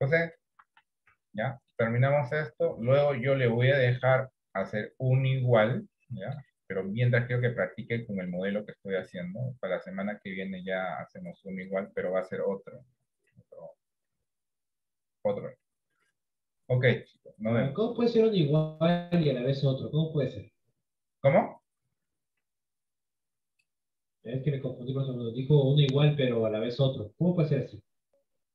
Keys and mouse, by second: 1.5 middle click, 3.0 shift+middle click, 5.5-6.6 shift+middle drag, 7.0-8.1 middle drag, 8.4 middle click, 10.6-11.8 middle drag, 19.3 middle click.